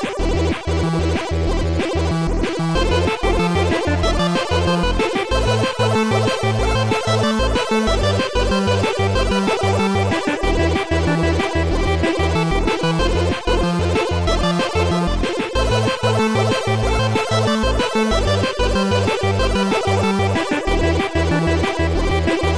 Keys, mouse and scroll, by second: 1.6 click, 4.1 shift+click, 4.5 shift+click, 4.9 shift+click, 5.7 shift+click, 6.5 shift+click, 8.1 shift+click, 8.8 shift+click, 9.8 shift+click, 11.6 shift+click, 12.5 shift+click, 13.0 shift+click, 13.5 shift+click, 14.6 shift+click, 17.9 click, 18.3 click, 19.6 click, 21.0 click.